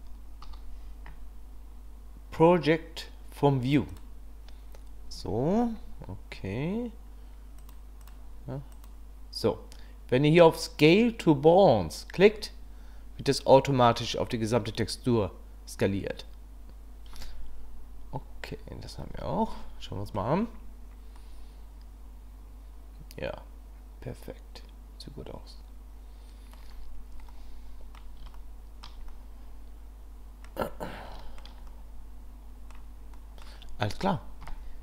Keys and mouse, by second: 0.4 u, 8.7 click, 19.0 Tab, 19.5-20.1 drag, 21.2-22.9 drag, 22.9-26.5 middle drag, 27.3-28.0 drag, 28.3-28.8 shift+middle drag, 29.1-30.4 middle drag, 31.2 shift+click, 31.7-32.7 drag, 33.1 drag, 33.3 middle click, 34.4 KP_1.